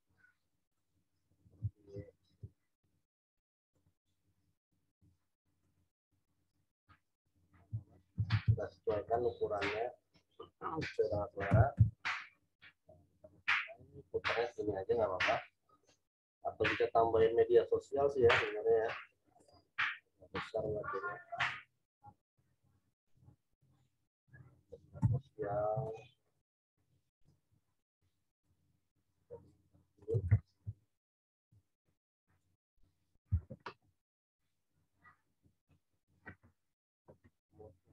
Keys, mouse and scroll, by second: 0.7 shift+right click, 1.2 shift+click, 2.7 shift+right click, 4.9 click, 5.6 shift+right click, 7.3 shift+click, 8.1 ctrl+t, 9.0 click, 11.5 Return, 18.2 z, 18.3 click, 19.0 v, 19.3 right click, 19.9 click, 20.5 right click, 21.3 click, 21.8 ctrl+t, 23.2 click, 24.9 Return, 25.8 right click, 26.2 click, 26.7 right click, 27.1 click, 28.4 shift+right click, 29.9 shift+click, 30.5 ctrl+t, 31.8 click, 35.0 click.